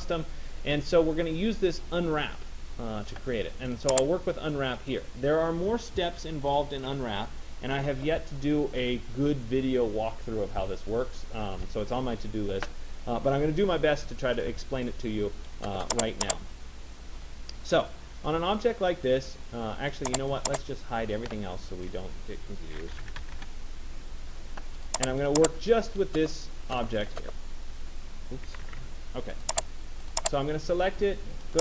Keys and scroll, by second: 23.0 Return, 28.3 ctrl+z.